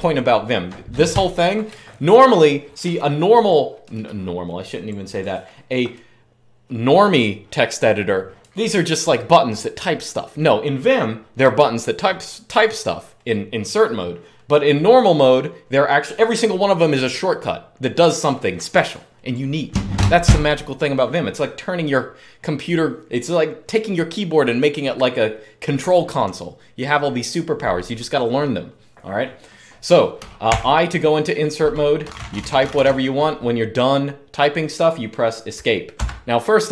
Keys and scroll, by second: 30.2 i, 31.5-33.0 typing, 35.8 Escape.